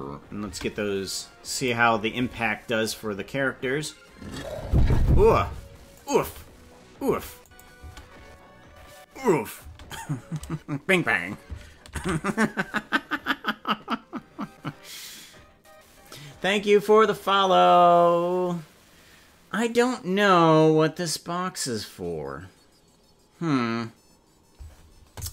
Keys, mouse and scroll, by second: 0.5 space, 1.5 click, 2.1 space, 5.1 space, 5.9 click, 6.1 space, 7.0 space, 7.4 click, 7.7 space, 9.7 space, 13.9 ctrl+s.